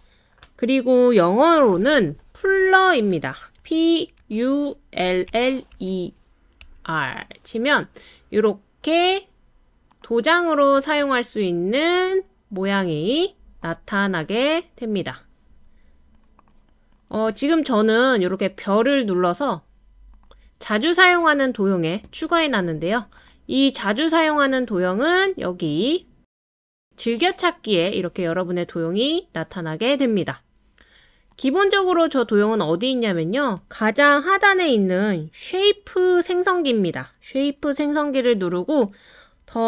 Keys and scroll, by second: 3.6-6.7 typing.